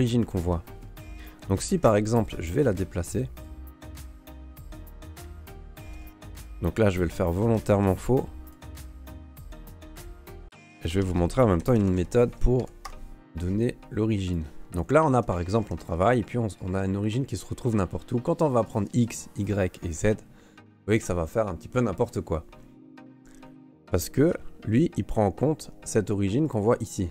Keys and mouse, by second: 1.4 Tab, 3.4 right click, 5.8 alt+c, 6.9 shift+c, 7.7 shift+click, 9.4 Tab, 10.5 space, 14.8 right click, 15.1 Tab, 15.6 Tab, 15.8 a, 16.0-16.5 middle drag, 18.6 click, 19.3 click, 19.9 click, 22.9 click, 23.1 click, 23.6 click, 24.2 shift+middle click, 26.4 click, 27.0 middle click.